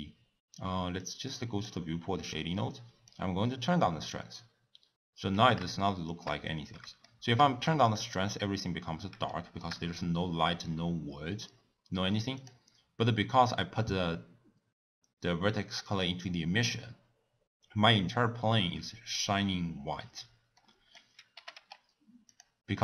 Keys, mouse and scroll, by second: 1.2-5.8 drag, 5.8-7.2 shift+middle drag, 9.3-9.9 shift+middle drag, 9.9-12.1 scroll up 1, 12.4 click, 21.3 g.